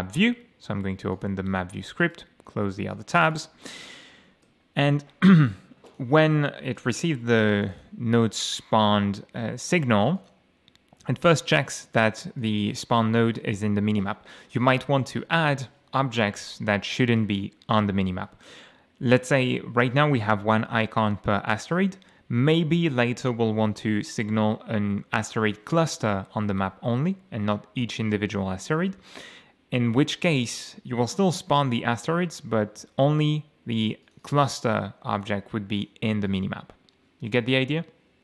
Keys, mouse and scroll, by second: 1.1 click, 2.0 right click, 2.9 click, 4.2 ctrl+shift+F11, 5.9 click, 6.8 click, 7.6 click, 8.8 scroll down 1, 10.2 click, 11.4 click, 12.4 click, 34.0 click, 35.2 click, 36.3 click.